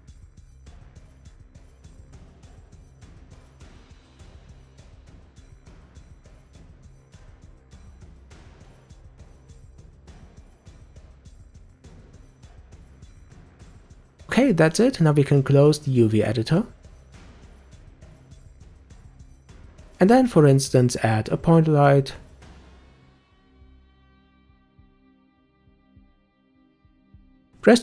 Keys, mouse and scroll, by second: 0.0-0.4 middle drag, 0.4 scroll up 2, 0.7 Tab, 0.8 shift+middle click, 1.0 click, 1.2-1.6 scroll down 4, 1.8 u, 2.2-2.6 scroll down 1, 2.6 r, 3.4 g, 3.8 s, 4.3 middle click, 4.9 shift+click, 5.2 u, 5.6 a, 5.7 s, 6.0 g, 6.9 click, 7.1 shift+click, 7.4-9.7 typing, 7.8 scroll down 2, 10.1 middle click, 10.2 Tab, 10.3 click, 10.4-11.0 middle drag, 11.0 click, 11.3 h, 11.4-12.4 middle drag, 12.4-13.0 scroll up 2, 13.0-14.8 middle drag, 16.3-19.4 right drag, 19.7-20.0 scroll down 2, 20.8 shift+a, 25.6 scroll down 2, 25.8-27.0 middle drag, 27.0 g.